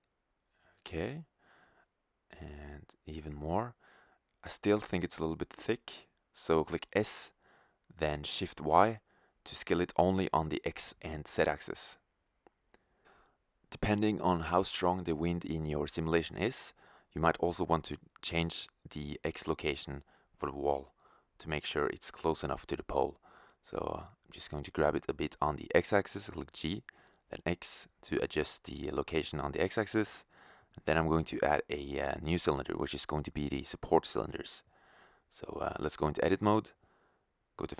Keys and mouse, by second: 0.4-1.9 middle drag, 1.4 s, 3.4-4.7 middle drag, 4.7 click, 8.5 s, 12.3-13.3 drag, 13.5 click, 14.3-14.8 middle drag, 15.5-17.9 middle drag, 19.8-21.4 right drag, 21.4-22.2 drag, 22.2-23.9 middle drag, 23.9 g, 25.7 g, 27.7 drag, 27.9-28.7 middle drag, 29.9 shift+a, 34.1-35.3 middle drag, 35.3 Tab, 37.0 right click.